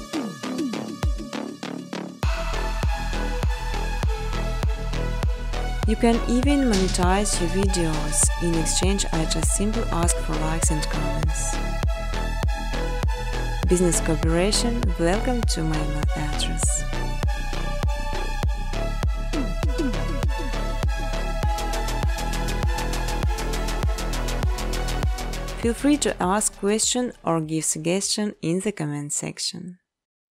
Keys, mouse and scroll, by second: 3.1 right click, 4.1 click, 4.8 click, 5.4 click, 6.0 click, 6.6 click, 7.8 click, 8.3 click, 8.5 right click, 9.9 click, 11.0 click, 11.2-12.6 typing, 13.4 click, 13.7 click, 14.3 scroll, 15.0 scroll, 15.9 click, 16.1 space, 17.6 space, 17.9 scroll, 18.3 click, 20.0 click, 23.3 click, 23.6 click, 24.2 click, 25.0 click, 25.8-26.3 scroll, 26.7 space, 26.9-27.9 scroll, 27.9-30.2 typing.